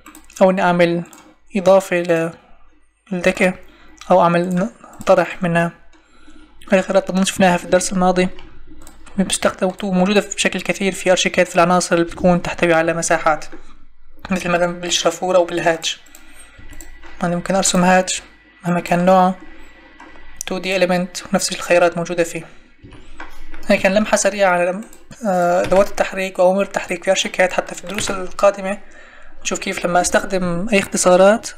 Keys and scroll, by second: 12.8 Escape, 14.2 Escape, 16.5 Escape, 22.8 Escape, 25.6 Delete, 27.9 Delete.